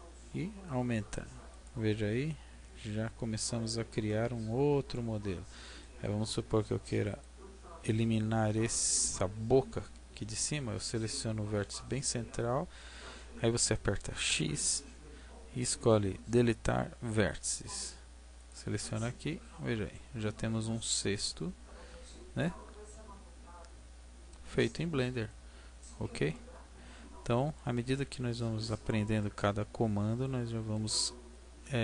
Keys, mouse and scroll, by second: 1.6 click, 1.9 middle click, 4.0 middle click, 7.1 right click, 14.2 x, 19.2 middle click, 26.3 middle click, 27.9 middle click, 29.6-30.3 scroll up 1, 30.3-30.7 scroll down 3, 30.7 middle click.